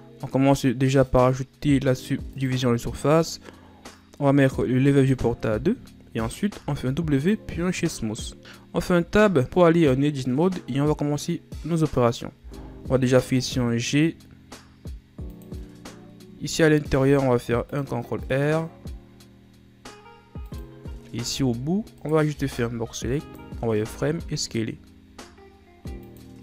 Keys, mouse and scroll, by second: 1.2-4.3 drag, 5.1-6.8 drag, 6.8 w, 8.4-9.1 drag, 9.1 Tab, 9.4-10.6 shift+scroll up 2, 10.6-12.5 scroll up 1, 12.5 g, 17.0 ctrl+r, 21.2-21.5 scroll down 2, 21.5 z, 22.1 right click, 22.5 b, 24.0 s.